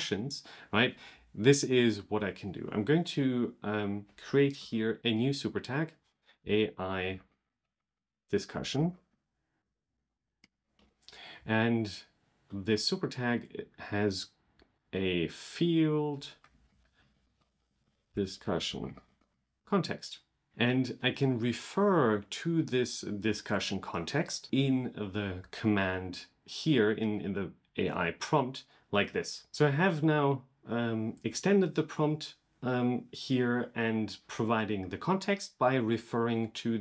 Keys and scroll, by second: 8.4 super+k, 9.8 super+k.